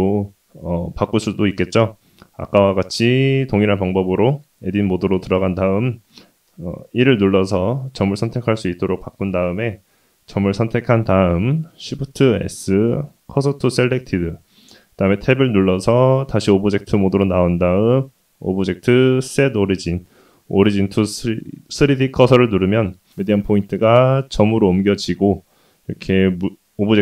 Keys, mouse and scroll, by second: 3.7 1, 4.7 click, 9.2 shift+s, 11.2 middle click, 11.2 scroll up 1, 12.0 Tab, 14.7-17.6 drag, 20.4 middle click, 21.0-21.5 scroll down 1, 21.5 s, 23.1 s, 26.3 click.